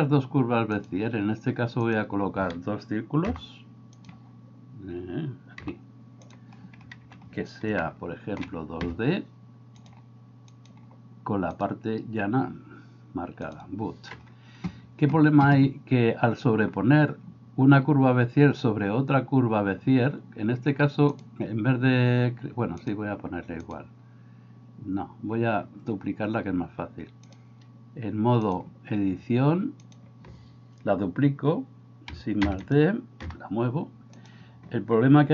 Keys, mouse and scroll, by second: 3.4 g, 5.6 g, 7.9 shift+middle click, 10.6-13.6 drag, 21.2-22.2 drag, 22.8-26.0 drag, 27.3 click, 28.6-30.0 drag, 32.5 shift+d, 33.3 g.